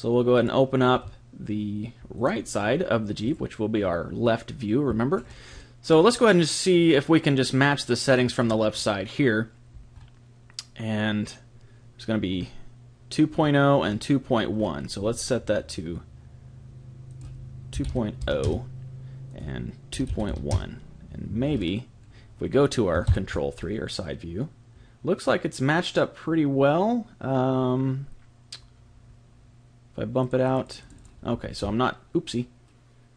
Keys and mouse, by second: 3.3 click, 5.0 middle click, 5.1-8.1 middle drag, 8.1 click, 9.8-11.8 middle drag, 12.4-16.5 middle drag, 17.1 click, 19.3 click, 21.5-25.9 middle drag, 30.2 click, 31.5 ctrl+z.